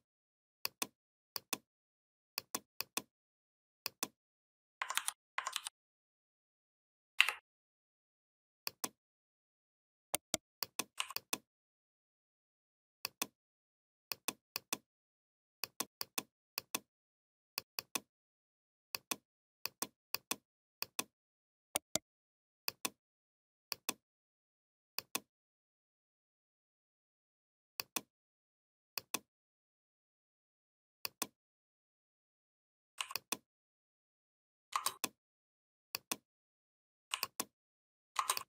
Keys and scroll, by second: 4.8 ctrl+c, 5.3 ctrl+f.